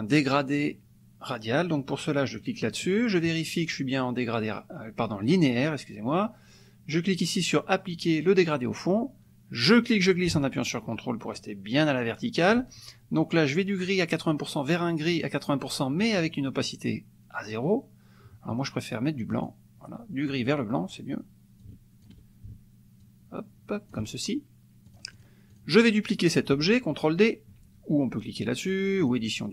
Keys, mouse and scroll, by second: 2.6 click, 9.6-12.7 drag, 13.9 click, 15.2 click, 19.3 click, 21.7 ctrl+click, 23.0-24.1 ctrl+drag, 24.9 click, 25.5 click, 29.0 click.